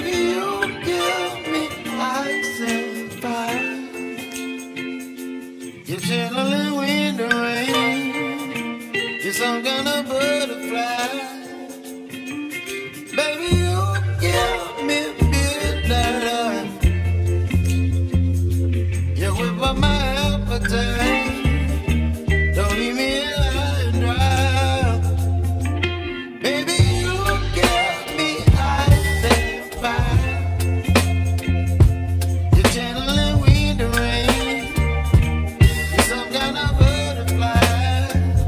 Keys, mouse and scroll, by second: 1.5 Tab, 2.9-5.5 shift+middle drag, 6.7 ctrl+r, 9.1 ctrl+r, 11.8 ctrl+b, 20.7-21.0 scroll up 2, 21.3-22.8 shift+middle drag, 22.8 ctrl+r, 27.7-28.9 middle drag, 28.9-30.2 scroll down 1, 33.9 /, 34.7-35.1 scroll down 1, 35.9-38.4 drag.